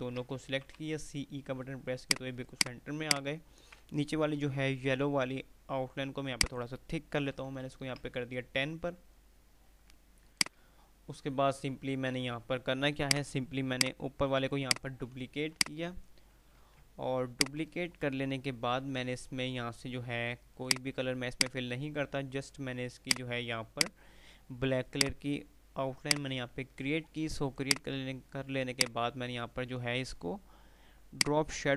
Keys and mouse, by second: 0.5-1.4 typing, 2.2 click, 3.2 alt+click, 4.5 F12, 6.5 click, 10.5 click, 12.2 F3, 13.2 click, 14.8 ctrl+right click, 15.6-16.5 drag, 17.0 F2, 17.2 click, 17.5-18.8 F2, 20.8 click, 21.5 right click, 25.0 click, 31.0-31.7 drag.